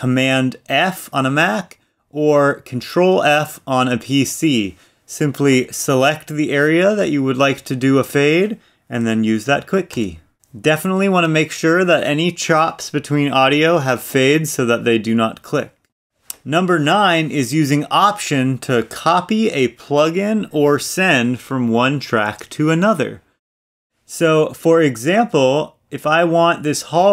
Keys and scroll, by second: 10.3 super+f.